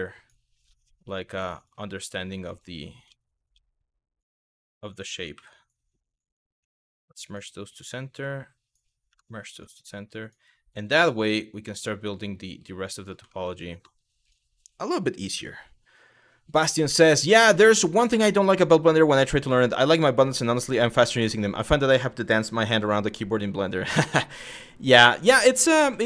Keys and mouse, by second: 0.9 w, 1.3 click, 2.7 ctrl+z, 3.2 ctrl+z, 4.1 click, 5.0 w, 5.3 click, 6.2 m, 7.9 click, 8.7 m, 9.8 click, 10.5 g, 11.3 click, 11.9 click, 12.1 g, 12.6 click, 13.0 middle click, 25.6 shift+middle click.